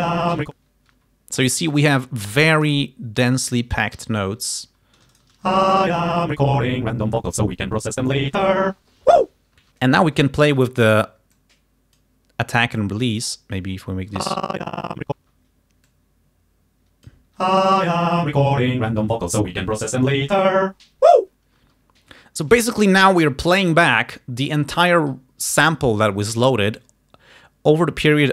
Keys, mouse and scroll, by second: 1.0 space, 3.3 g, 3.6 click, 4.1 alt+d, 5.3 alt+shift+right click, 5.5 alt+shift+space, 5.9 alt+shift+click, 9.7 space, 11.4 click, 12.9 click, 14.2 space, 15.3 space, 16.0-17.4 drag, 17.5 space, 21.7 space.